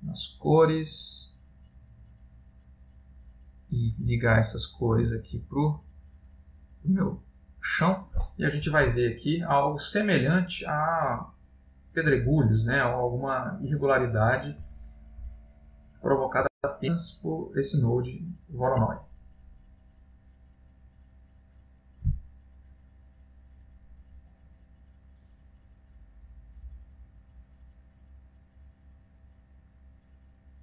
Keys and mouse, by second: 0.3 middle click, 1.6 click, 5.1 click, 12.3 click, 17.1 click.